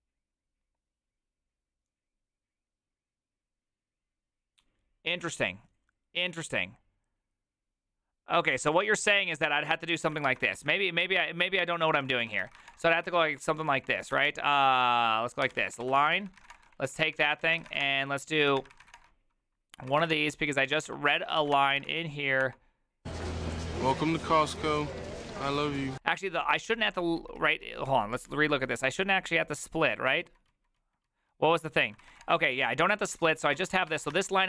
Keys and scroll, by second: 10.2 ctrl+c, 10.6 alt+{, 11.0 ctrl+c, 11.2-22.3 typing, 14.7 Tab, 22.4 Return, 23.2 ctrl+^, 23.7 ctrl+o, 23.8 ctrl+o, 24.0 ctrl+o, 24.4-27.9 typing, 30.0-30.7 typing, 31.8-34.4 typing.